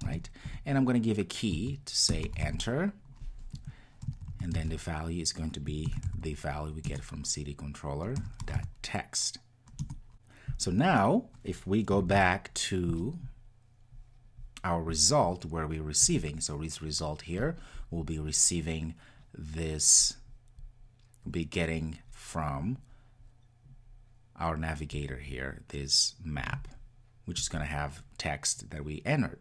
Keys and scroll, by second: 6.9 Return, 12.0 super+s.